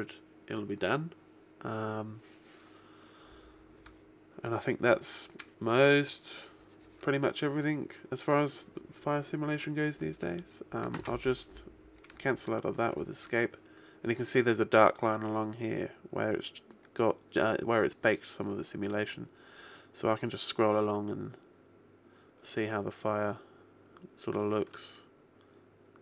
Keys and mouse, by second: 12.0 Escape, 18.8 click.